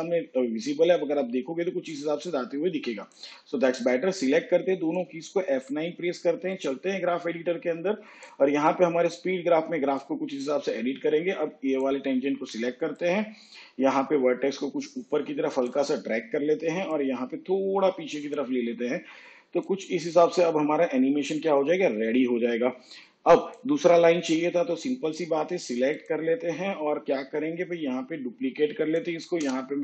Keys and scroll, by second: 5.5 F9, 28.2 ctrl+d, 29.3 Return.